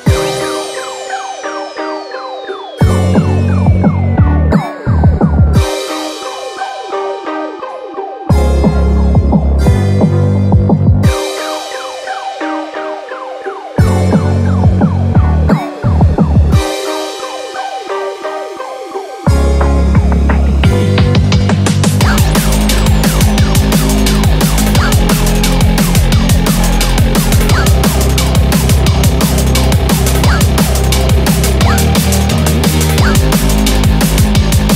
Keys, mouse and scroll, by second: 3.8 click, 5.1 click, 5.7 click, 7.7 click, 8.3 scroll up 2, 8.8 scroll up 1, 15.5 click, 16.6-17.3 scroll down 5, 17.9-18.5 scroll up 5, 18.5-19.1 scroll down 2, 19.5 click, 21.6 click, 22.8 click, 24.7 click, 34.2 click.